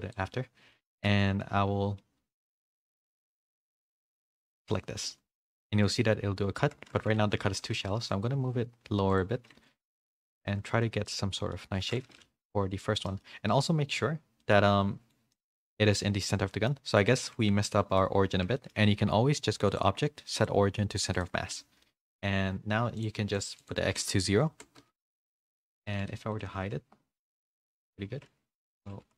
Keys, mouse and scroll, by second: 0.8 shift+middle click, 3.3 click, 5.5-7.5 middle drag, 5.5 h, 6.7 ctrl+z, 7.8 g, 9.7 h, 10.0 middle click, 11.0 middle click, 11.8 ctrl+z, 12.1 middle click, 13.0 middle click, 14.4 middle click, 15.3 middle click, 16.2 middle click, 16.9 middle click, 18.5 shift+middle click, 19.7-21.2 drag, 21.8 middle click, 23.0 click, 23.6-25.1 drag, 25.3 middle click, 26.2 h, 26.3 middle click, 27.3 ctrl+z, 27.9 g, 29.0 h.